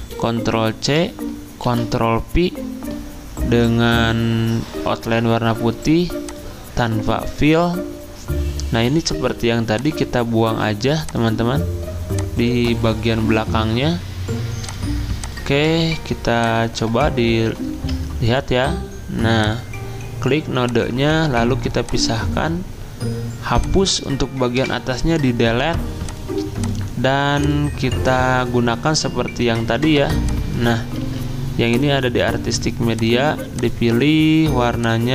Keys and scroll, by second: 1.7 ctrl+v, 17.7 ctrl+z, 24.6 Delete, 31.0 ctrl+z.